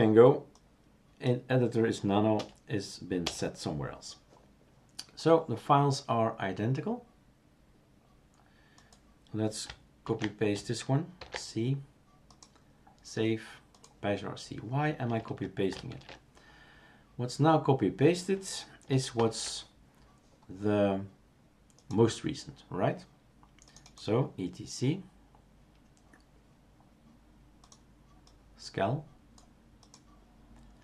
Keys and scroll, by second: 2.4 BackSpace, 3.2 BackSpace, 10.1 ctrl+a, 11.2 ctrl+c, 15.9 shift+super+q, 19.2 shift+super+Return.